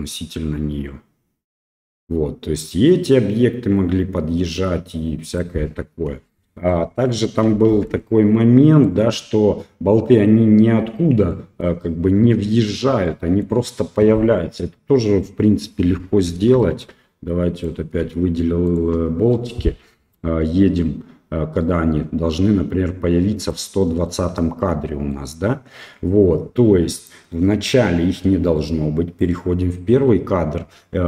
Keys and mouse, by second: 6.2 space, 6.7 middle click, 7.7 shift+Left, 8.9 click, 11.4 middle click, 13.1 middle click, 16.7 shift+middle click, 17.5 click, 18.6 shift+click, 20.1-23.5 drag, 23.9 middle drag, 25.1-25.5 middle drag, 27.0-29.2 drag.